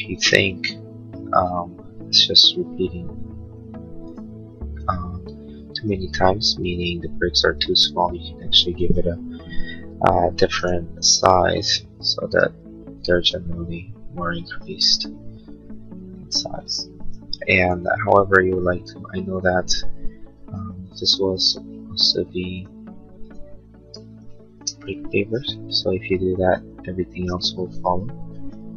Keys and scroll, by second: 12.4 Tab, 20.4 space, 22.6 b, 24.4 space.